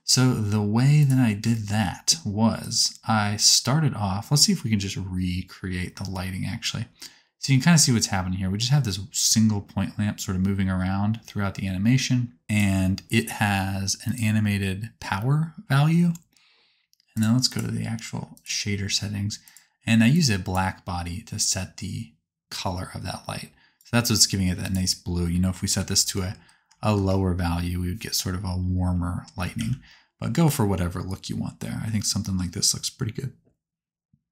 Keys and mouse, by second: 2.6-4.4 middle drag, 4.4-10.8 drag, 10.8-14.1 right drag, 17.5-19.5 drag, 20.1-27.3 drag, 26.1 KP_0, 29.5 ctrl+z.